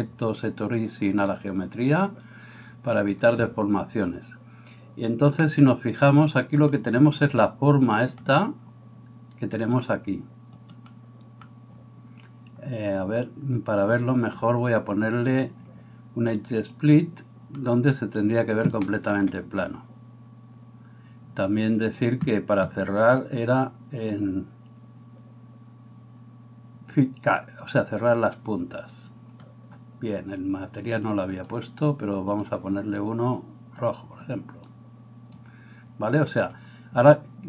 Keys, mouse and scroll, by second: 5.4-15.1 middle drag, 7.8 right click, 9.6 right click, 10.6 right click, 15.1-28.2 drag, 28.2-37.4 middle drag, 31.0-34.0 drag, 36.1 right click.